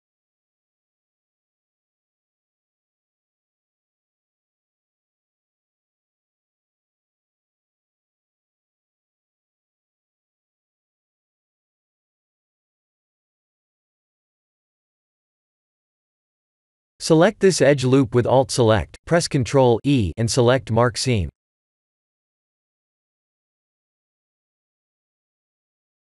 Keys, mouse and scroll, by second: 1.1 middle click, 2.9 KP_1, 7.0 Tab, 9.2 a, 10.2 click, 10.2 a, 11.0-11.5 scroll up 4, 11.5 middle click, 16.8 2, 17.3 alt+click, 18.5 ctrl+e, 23.2-26.1 scroll up 2.